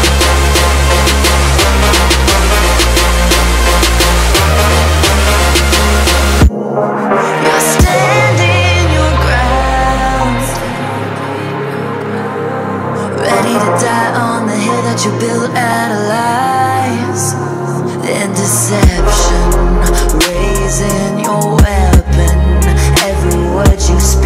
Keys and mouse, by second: 0.1-0.8 drag, 1.0 click, 1.7 click, 2.8 click, 3.3 ctrl+z, 3.4 click, 5.3 click, 5.8 click, 6.3-8.6 drag, 9.5-11.3 drag, 11.9 click, 12.6 click, 13.3-16.8 drag, 17.2-18.9 middle drag, 18.9-21.0 drag, 21.2 shift+middle click.